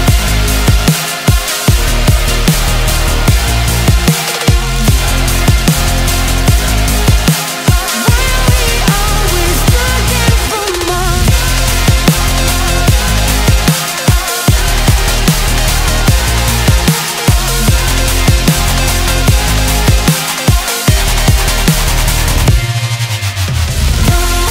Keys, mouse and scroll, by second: 0.0-3.1 middle drag, 4.8-6.1 middle drag, 6.1-6.6 scroll down 2, 6.6 1, 7.1 middle click, 7.7-8.5 scroll up 4, 8.5-11.3 middle drag, 13.7 Tab, 14.1-15.4 scroll down 6, 15.4 click, 16.4 click, 17.2-18.0 scroll down 5, 18.0-19.1 drag, 19.1-19.6 scroll up 9, 19.7-22.7 middle drag, 22.9-24.5 scroll down 10.